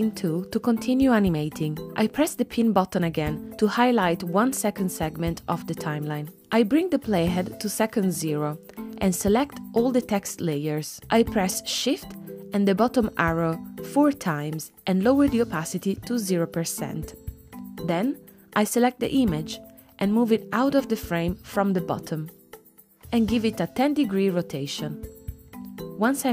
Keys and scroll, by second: 12.6 shift+Down.